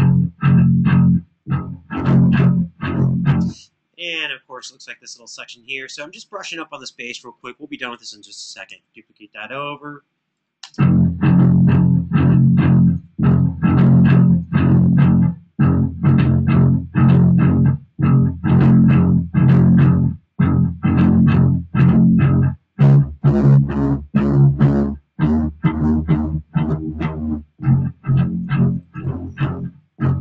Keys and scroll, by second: 5.1 space, 8.4 super+d, 10.3 space.